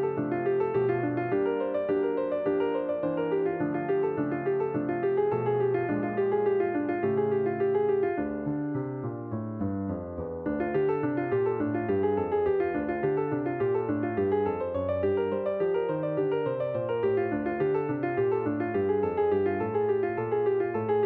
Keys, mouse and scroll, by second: 2.5-10.5 drag, 11.7-14.9 drag, 16.5-21.0 drag.